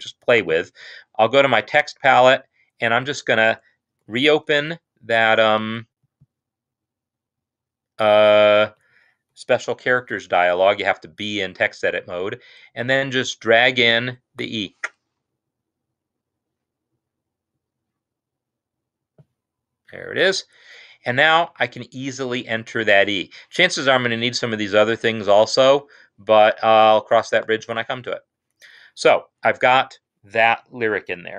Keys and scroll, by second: 8.8 Right, 9.7 F2, 9.9 F2, 28.7 Escape.